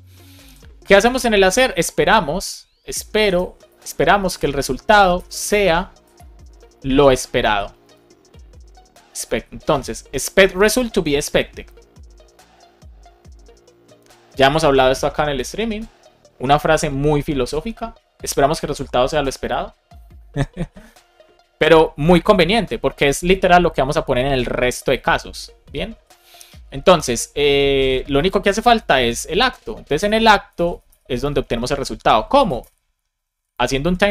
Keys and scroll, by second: 0.4 Return, 3.7 shift+9, 4.9 Right, 6.1 BackSpace, 6.3 shift+b, 6.7 shift+9, 8.4 Return, 9.6 Right, 20.8 shift+space, 22.2 BackSpace, 28.6 Return, 30.0 space, 31.1 space, 33.4 Down, 33.7 Return.